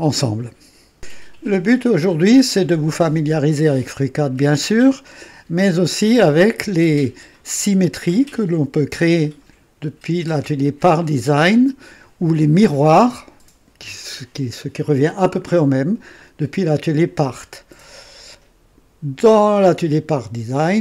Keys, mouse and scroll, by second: 0.9 click.